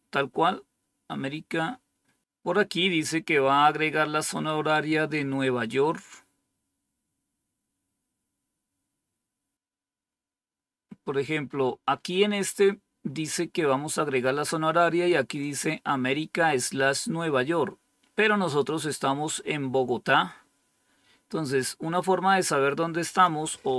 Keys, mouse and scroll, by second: 6.6-11.4 scroll down 2, 11.4-12.7 scroll up 4, 15.3-16.6 drag, 19.5-21.2 scroll down 5, 21.2-22.0 scroll up 2, 23.0 click.